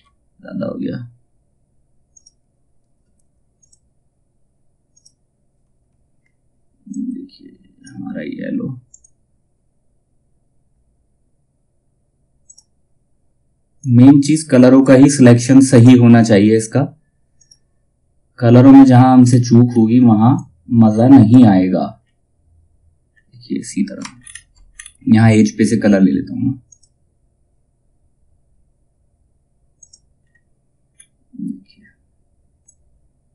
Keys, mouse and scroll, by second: 1.6-8.4 drag, 12.0-15.3 drag, 18.7-19.2 scroll up 1, 19.8-21.5 drag, 21.5 scroll down 1, 24.2-26.2 scroll up 1, 26.2 click, 29.3 click, 29.7 scroll down 1, 32.1-33.3 drag.